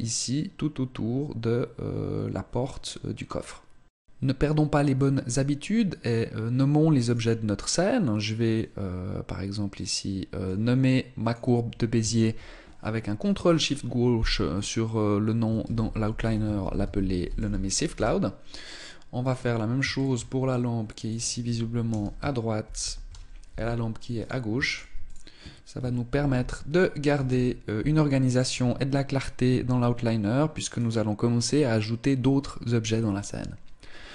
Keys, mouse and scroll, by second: 6.8 right click, 10.2 click, 13.4 ctrl+click, 18.9 click, 19.7 ctrl+click, 23.9 click, 24.4 ctrl+click, 30.4 right click.